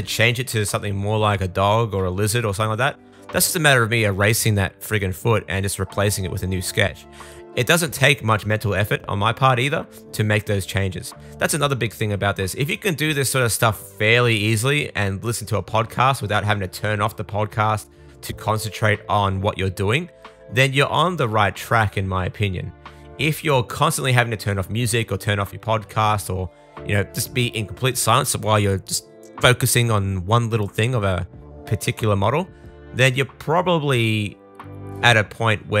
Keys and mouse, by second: 2.2 super+z, 2.5 super+z, 4.4 super+z, 4.6 super+z, 7.2 super+z, 7.3 super+z, 7.8 super+z, 8.0 super+z, 10.2 super+z, 11.4 super+z, 13.3 super+z, 15.3 super+z, 15.5 super+z, 16.0 super+z, 16.3 super+click, 16.7 shift+super+click, 17.3-18.8 drag, 18.8 super+z, 19.0 super+z, 19.3 super+z, 21.9 super+z, 22.0 super+z, 22.4 super+z, 24.9-27.8 drag, 26.6 super+z, 26.6 s, 26.8 super+z, 27.8 middle click, 28.1 click, 28.9 alt+shift+middle click, 29.3 super+middle click, 29.8-31.6 super+drag, 29.9 super+z, 30.6 super+z, 31.6-32.0 super+z, 32.3 super+click, 32.6 super+z, 32.8 click, 33.2 super+z, 33.3 super+z, 33.7 super+z, 34.8 super+z, 34.9 super+z, 35.4-35.8 drag.